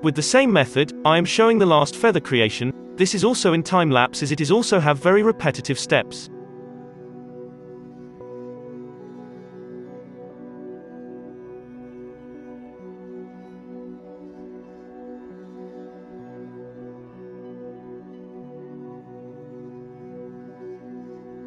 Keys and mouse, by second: 0.0-1.8 typing, 0.2 Tab, 0.9 ctrl+z, 2.2 ctrl+r, 2.8 Tab, 2.9 Tab, 3.1 Tab, 3.2-4.0 typing, 3.4 alt+a, 4.0 alt+a, 5.7 click, 5.9 Tab, 6.0-8.9 drag, 6.1 z, 6.2 KP_1, 8.6-15.4 typing, 9.5 click, 9.6 alt+a, 9.9 alt+a, 10.6 middle click, 10.7 alt+a, 10.8 Tab, 10.9 Tab, 11.2 click, 11.3 Tab, 11.3 middle click, 11.7 click, 11.8 alt+a, 12.5 alt+a, 13.2 Tab, 13.2 middle click, 13.3 Tab, 13.5 middle click, 13.5 alt+a, 14.2 middle click, 14.4 alt+a, 14.6 click, 16.3-17.6 drag, 16.4 ctrl+z, 16.7 ctrl+z, 16.9-18.4 typing, 17.6-19.8 middle drag, 17.8 click, 18.4 ctrl+z, 19.8-21.4 drag, 19.8 f, 20.0 ctrl+z, 20.1 ctrl+z, 20.1-20.7 f, 21.1 f.